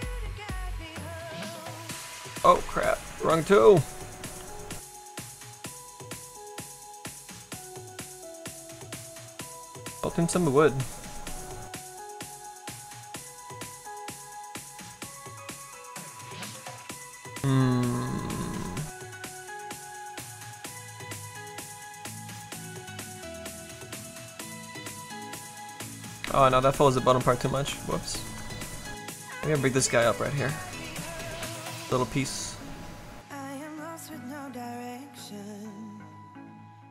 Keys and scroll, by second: 2.3 z, 4.4 s, 26.0 ctrl+z, 26.2 ctrl+z, 27.2 ctrl+z, 27.6 ctrl+z, 28.2 ctrl+z.